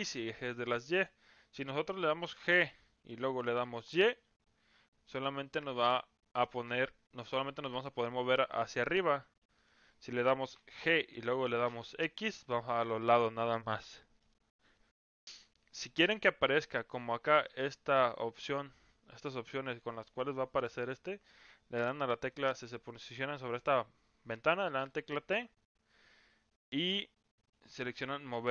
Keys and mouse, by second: 2.3 g, 10.5 g, 17.3 click, 19.7 middle click, 22.1 click, 24.8 t, 25.3 t, 27.8 click.